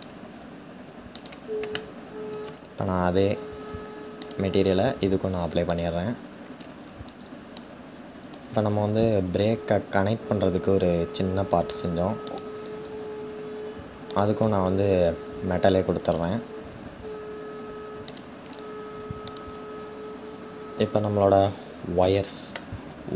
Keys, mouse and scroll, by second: 4.0 click, 5.7-7.0 scroll down 1, 7.0 scroll down 1, 7.3-12.0 drag, 17.8-19.0 drag.